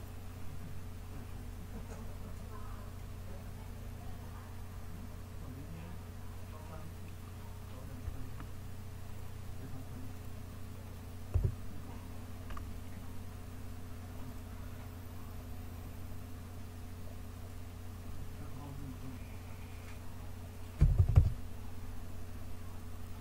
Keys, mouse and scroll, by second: 4.1 click, 5.0 click, 6.0 KP_0, 8.6 click, 10.1-11.1 middle drag, 11.1-13.9 drag, 14.5 KP_0.